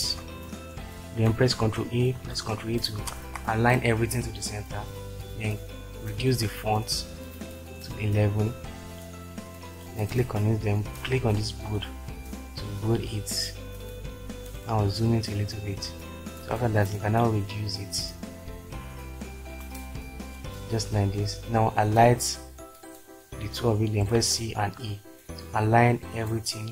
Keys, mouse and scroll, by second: 0.0-0.4 typing, 1.6 ctrl+a, 2.2 ctrl+e, 3.1 ctrl+space, 22.5-23.6 drag, 24.1-24.8 typing.